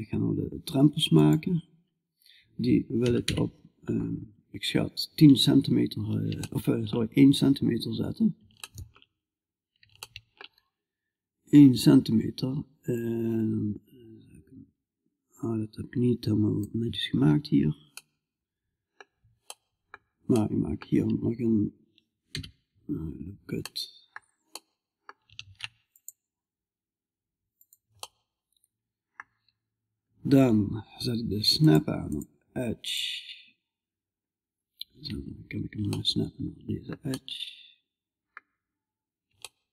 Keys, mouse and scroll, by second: 2.5 KP_5, 2.7 KP_1, 5.2-12.4 middle drag, 12.4-16.0 drag, 17.4-21.7 middle drag, 21.7 KP_5, 22.4-24.2 middle drag, 24.8 ctrl+r, 25.3-27.0 middle drag, 27.5-31.5 middle drag, 31.5-35.6 drag, 35.6-39.7 middle drag.